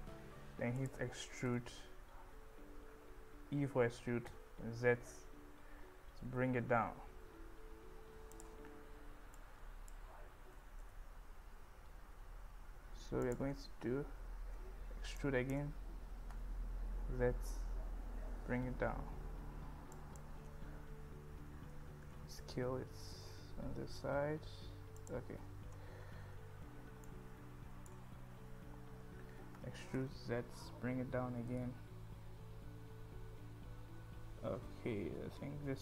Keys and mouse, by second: 0.8 click, 1.7 e, 4.4 z, 6.3 z, 8.4 click, 9.4 click, 10.6 g, 10.9 z, 13.3 click, 15.2 click, 16.6 e, 16.8 z, 18.7 z, 20.0 click, 22.1 s, 25.0 click, 27.1 click, 30.0 z, 31.5 z.